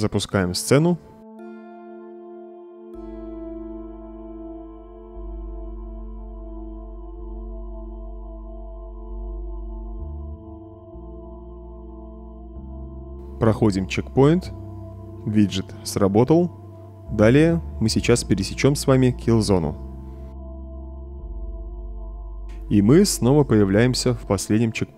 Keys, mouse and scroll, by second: 0.8 click, 2.0 click, 2.8 Tab, 6.1-6.8 typing, 11.6 a, 12.6 a, 15.8-16.5 typing.